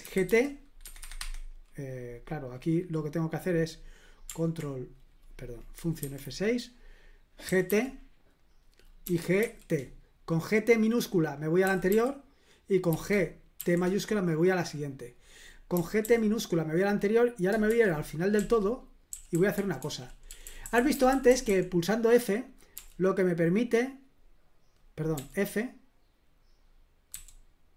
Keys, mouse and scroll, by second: 0.0-0.8 typing, 0.8 Escape, 1.0 Escape, 1.2 Escape, 6.0 F6, 7.2-9.4 typing, 11.4-13.6 typing, 15.7 typing, 17.7-22.7 typing, 25.1 f.